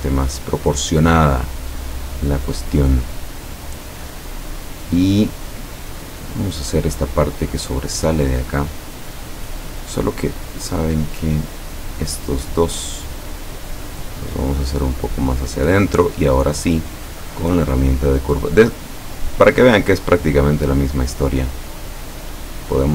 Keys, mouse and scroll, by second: 6.3 click, 10.7 click, 12.1 click, 13.3-15.8 drag, 17.1 click, 19.2 click, 20.3-22.9 drag.